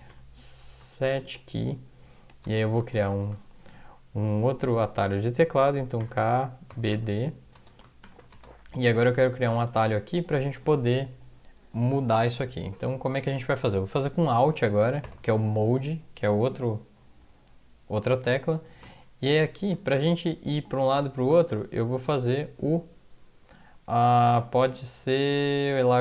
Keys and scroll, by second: 0.0-3.4 typing, 3.6 Left, 5.1-10.3 typing, 14.4 Left, 15.0 typing, 18.8 -, 21.3 typing, 22.6 Left.